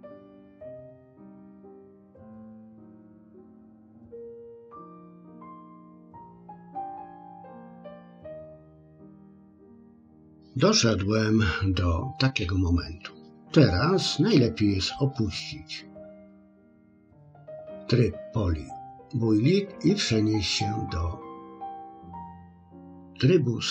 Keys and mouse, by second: 0.8 click, 2.1 click, 3.0-4.0 ctrl+drag, 4.3 middle click, 5.3 ctrl+click, 6.8 click, 7.6 middle click.